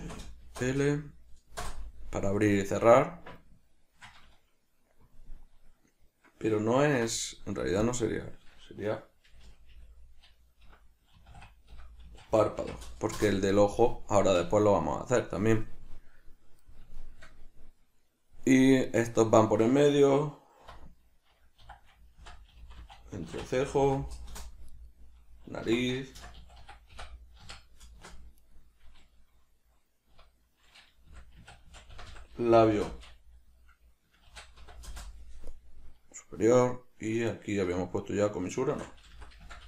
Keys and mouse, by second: 7.1 F2, 9.6 BackSpace, 13.3 Return, 17.1 shift+middle click, 19.0 right click, 20.7 F2, 24.9 right click, 25.8 F2, 28.5 right click, 30.3 F2, 35.7 right click, 37.8 F2.